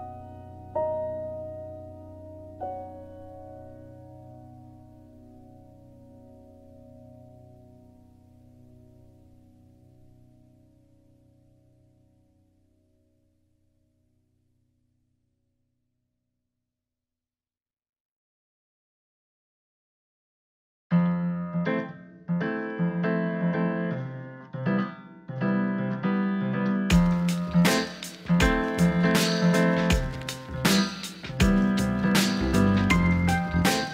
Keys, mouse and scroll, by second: 5.8 g, 6.9 z, 8.5 click, 9.1 click, 12.1 click, 13.2 middle click, 14.0 KP_3, 16.0-19.7 drag, 21.0 click, 21.9 middle click, 22.3 alt+z, 22.6 middle click, 24.2 Tab, 24.4-26.0 drag, 26.4-26.9 drag, 28.2 KP_1, 30.9 Tab, 32.2 alt+z.